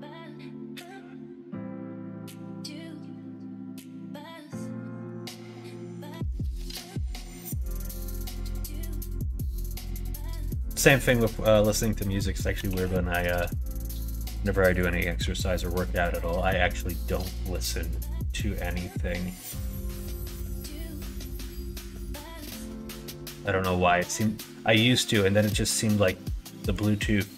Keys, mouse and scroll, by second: 2.6 middle click, 4.3 middle click, 6.6 middle click, 8.1 shift+d, 12.5 g, 15.1 middle click, 15.6 middle click, 20.3 middle click, 20.8 middle click, 21.6 shift+middle click, 22.9-24.3 drag, 24.7 middle click, 26.1 click, 27.3 scroll up 1, 27.3 middle click.